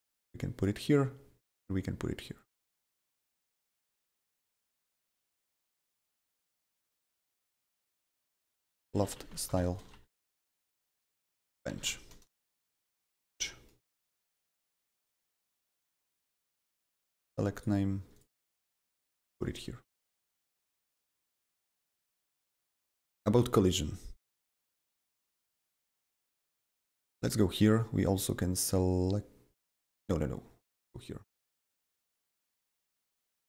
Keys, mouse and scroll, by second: 5.0-8.1 drag, 5.9-13.8 typing, 14.2 Return, 15.8 click, 16.3 click, 17.1 ctrl+c, 17.6 click, 18.1 click, 19.0 ctrl+v, 19.3 click, 21.7 click, 21.7 click, 26.7 click.